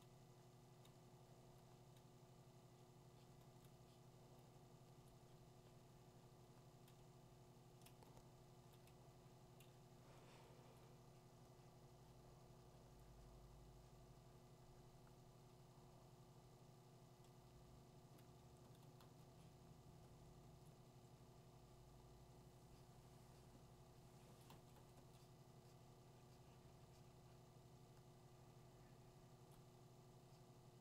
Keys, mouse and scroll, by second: 3.4 [, 5.0 click, 7.9 click, 8.6-9.0 [, 10.8 click, 17.3 click, 18.2 click, 24.4 click, 24.8 click, 27.3 click, 29.5 click.